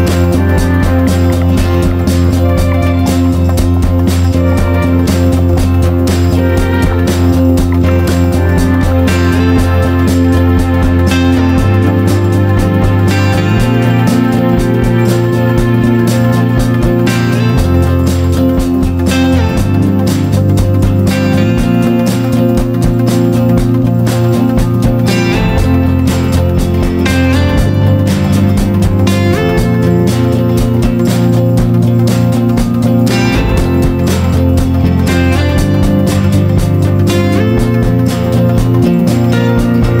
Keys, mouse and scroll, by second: 0.9 ctrl+g, 0.9 click, 2.7 Down, 2.8 Down, 3.1 Down, 3.2 Down, 5.2 click, 8.1 ctrl+shift+g, 8.9 click, 10.5 click, 11.0 ctrl+shift+g, 11.7 click, 12.1 ctrl+shift+g, 12.9 click, 13.3 ctrl+shift+g, 14.1 click, 14.5 ctrl+shift+g, 15.5 click, 16.5 ctrl+shift+g, 17.2 click, 17.7 ctrl+shift+g, 18.5 click, 18.9 ctrl+shift+g, 19.7 click, 20.2 ctrl+shift+g, 21.0 click, 21.5 ctrl+shift+g, 22.4 click, 26.2 F4, 26.5 click, 30.8 F4, 31.1 click, 34.7 F4, 35.1 click, 38.6 F4, 38.9-40.0 drag.